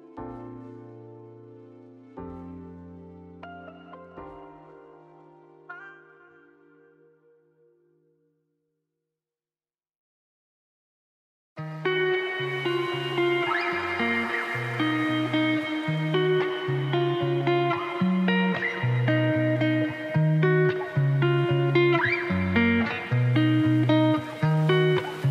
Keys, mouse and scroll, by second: 0.3 middle click, 0.8 Tab, 0.9 scroll down 2, 1.0 click, 1.1 middle click, 1.3 z, 1.5-2.8 middle drag, 2.8 click, 3.0 middle click, 3.3 Tab, 3.5 s, 3.9 a, 4.1 s, 5.2 middle click, 5.4 g, 6.6 shift+middle click, 7.0 Tab, 7.2 scroll down 1, 7.3-8.5 middle drag, 8.6-10.4 drag, 10.4 ctrl+p, 11.0 KP_Divide, 11.4 click, 11.6 click, 11.7 scroll down 2, 11.8 middle click, 12.1 r, 13.2-15.6 middle drag, 15.6 ctrl+z, 16.2-19.4 shift+drag, 19.4 middle click, 19.6 g, 20.3 middle click, 20.5 scroll down 3, 20.6 middle click, 20.8 r, 21.3 g, 22.5 click, 22.7 scroll down 2, 22.8 shift+middle click, 23.2 ctrl+s, 23.7 shift+middle click, 24.1-25.3 scroll up 2.